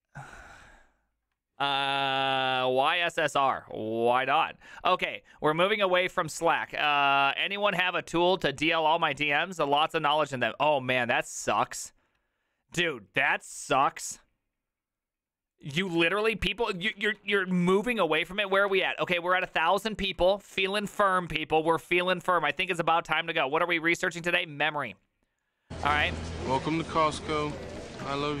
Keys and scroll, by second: 17.8 alt+r, 17.8 Right, 18.1 Right, 18.8 Escape, 19.5 alt+r, 19.7 Left, 20.2 Left, 20.5 Left, 21.3 Left, 21.6 Escape.